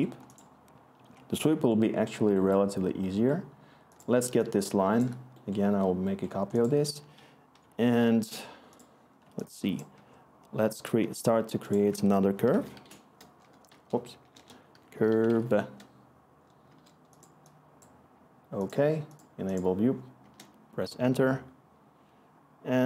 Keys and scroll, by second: 10.0-10.7 typing, 11.8 Tab, 12.0-15.7 typing, 16.6 Return, 18.2 BackSpace, 20.2 Return.